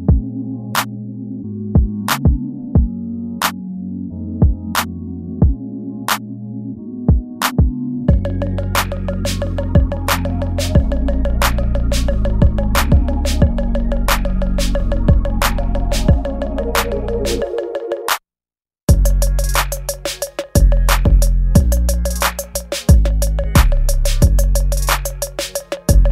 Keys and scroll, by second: 1.4 space, 2.4 ctrl+z, 3.3 ctrl+z, 4.3 ctrl+z, 4.9 ctrl+z, 5.2 ctrl+z, 5.7 ctrl+z, 8.0 space, 9.2 ctrl+z, 10.1 space, 11.4 ctrl+z, 11.6 ctrl+z, 12.1 ctrl+z, 13.9 space, 15.0 ctrl+z, 16.2 ctrl+z, 16.8 ctrl+z, 18.3 ctrl+s, 20.5 ctrl+s, 20.7 ctrl+s, 21.5 space, 22.5 space, 23.0 space, 23.5 ctrl+z, 24.8 space, 25.4 ctrl+z.